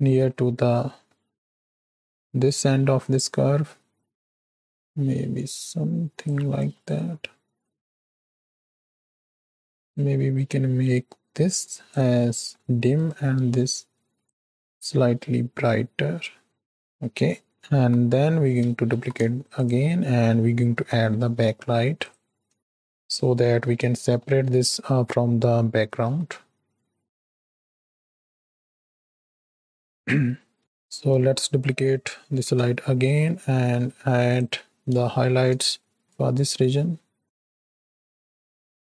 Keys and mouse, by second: 0.3 shift+click, 1.1 middle click, 2.4-6.3 drag, 6.8-8.1 drag, 8.3 click, 9.2 shift+middle click, 9.4 middle click, 9.8-11.9 drag, 12.1-12.5 middle drag, 12.9-16.6 drag, 17.6 KP_3, 18.8 shift+d, 20.7 r, 22.5 g, 23.9 shift+middle click, 26.0 r, 27.8-29.6 drag, 30.1 middle click, 30.6 KP_7, 32.3 shift+d, 35.0 shift+click, 35.7 middle drag, 36.0 KP_3, 36.1-38.9 drag.